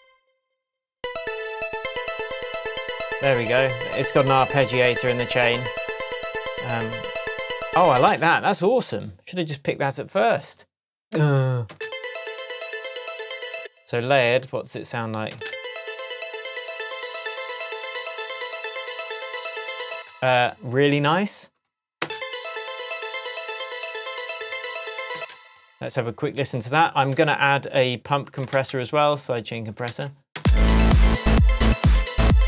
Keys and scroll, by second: 8.0 space, 11.7 space, 13.5 space, 14.1 super+space, 15.3 super+space, 19.9 space, 22.0 space, 25.1 space, 28.5 super+c, 29.8 super+v, 30.3 super+space, 31.1 space.